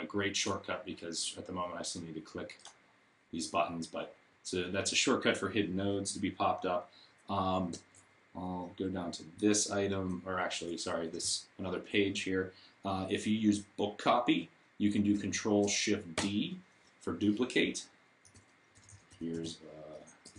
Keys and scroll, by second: 16.0 shift+d, 18.2 super+a, 18.2-20.3 typing.